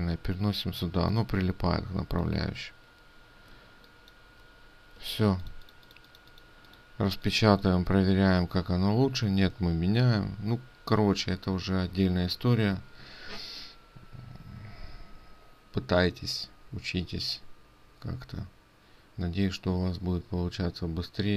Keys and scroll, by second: 4.1 ctrl+space, 5.6 ctrl+space.